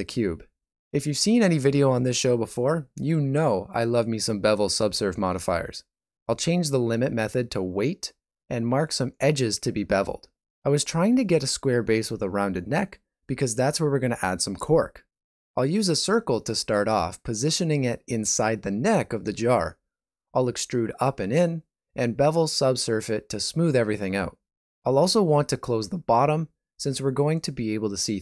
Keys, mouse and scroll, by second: 2.3 click, 4.6 click, 5.6 middle click, 5.8 right click, 6.7 n, 7.8 click, 9.2 alt+z, 9.9 ctrl+middle click, 10.4 shift+middle click, 11.1 alt+right click, 13.4 shift+middle click, 14.2 middle click, 15.1 alt+z, 15.8 alt+right click, 17.0 middle click, 18.6 e, 18.7 g, 20.3 e, 21.2 m, 22.5 a, 22.6 s, 23.7 alt+a, 23.9 Tab, 24.2 ctrl+middle click, 24.8 middle click, 25.1 Tab, 25.3 alt+z, 25.5 middle click, 26.0 middle click, 27.1 alt+right click, 27.8 e.